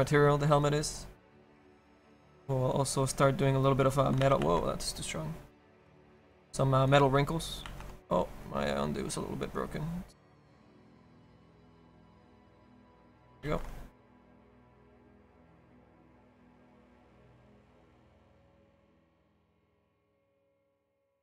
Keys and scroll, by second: 2.5 s, 4.3 ctrl+z, 4.6 ctrl+z, 7.2 ctrl+z, 7.8 ctrl+z, 13.5 ctrl+z, 14.6 ctrl+z.